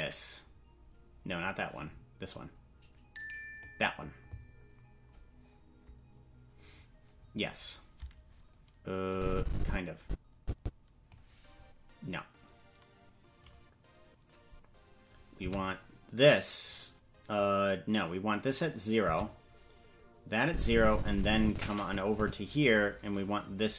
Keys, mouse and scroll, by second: 2.3-3.6 drag, 9.1-11.1 drag, 15.4 i, 17.3-18.5 drag, 19.0 i, 20.4-22.1 drag, 23.1-23.7 drag.